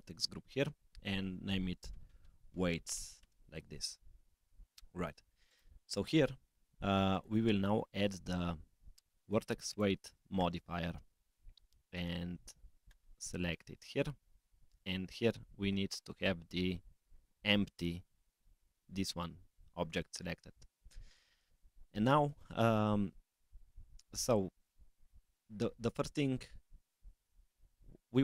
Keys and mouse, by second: 5.4 click, 7.1-9.8 drag, 11.2-13.0 drag, 15.9-17.4 drag, 22.3-28.2 drag.